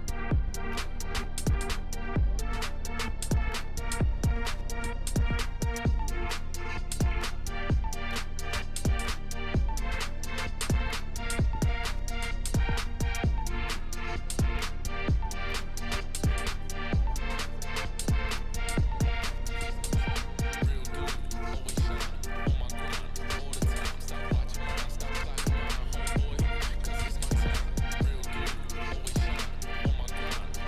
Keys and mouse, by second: 0.3 click, 0.6 drag, 0.9 click, 1.3 click, 1.7 shift+middle click, 2.6 click, 3.1-4.5 drag, 4.7 drag, 5.4-5.9 drag, 6.3 click, 6.7-7.3 drag, 7.8 click, 8.5-10.1 drag, 11.5-12.8 drag, 13.7 click, 14.3-15.0 drag, 15.4 drag, 16.0 drag, 16.5-16.9 drag, 17.2 click, 18.5 click, 19.6 click, 21.5 drag, 23.1-24.0 drag, 24.4-25.2 drag, 25.9 ctrl+s, 26.3 shift+a, 27.4 click, 27.9 Tab, 28.1 s, 29.6 2, 29.9 click, 30.2 click.